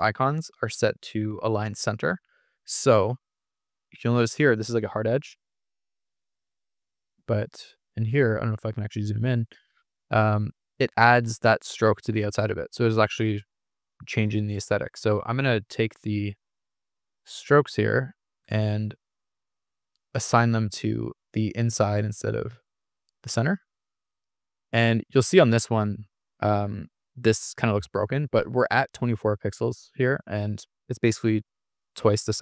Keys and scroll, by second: 0.7 super+=, 3.7 super+=, 5.2 super+=, 9.8 super+=, 15.1 Escape, 15.6 super+z, 16.8 super+=, 19.9 super+=, 26.6 super+=, 27.1 super+=, 31.2 super+-.